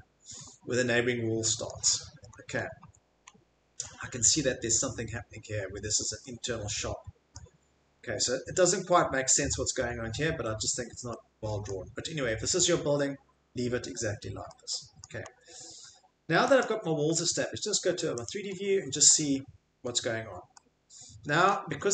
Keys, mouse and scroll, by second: 0.0 click, 0.4 click, 1.7 click, 1.8 click, 1.9 click, 2.3 click, 2.6 click, 2.8 Escape, 3.3 click, 3.5 click, 3.7 click, 7.3 click, 7.8 click, 7.9 click, 9.3 middle click, 11.6 middle click, 12.8 click, 13.0 middle click, 14.0 middle click, 15.0 middle click, 15.3 Escape, 15.7 middle click, 16.6 click, 17.1 Escape, 18.2 click, 19.2 middle click, 19.4 middle click, 19.8 middle click, 21.5 shift+middle click, 21.8 middle click.